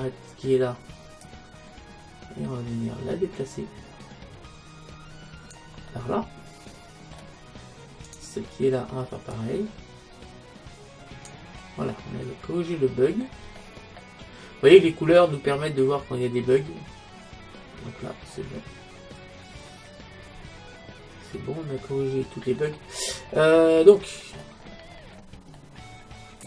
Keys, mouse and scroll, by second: 1.3-3.1 drag, 5.9-7.8 middle drag, 8.1-9.9 right drag, 9.4-11.1 drag, 11.6-14.6 middle drag, 14.9 middle click, 22.9 middle click, 23.7-26.4 middle drag.